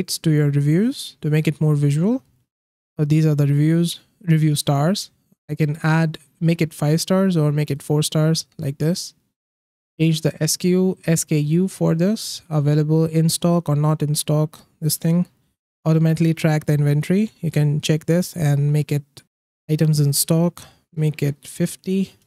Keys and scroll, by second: 20.9-22.1 typing.